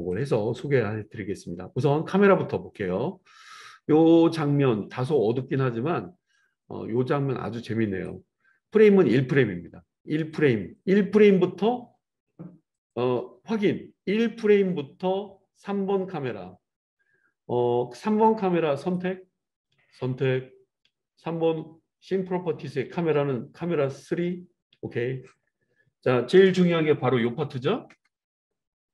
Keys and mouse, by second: 0.1-6.4 drag, 6.4-15.2 right drag, 15.2-18.9 drag, 18.9-28.9 middle drag.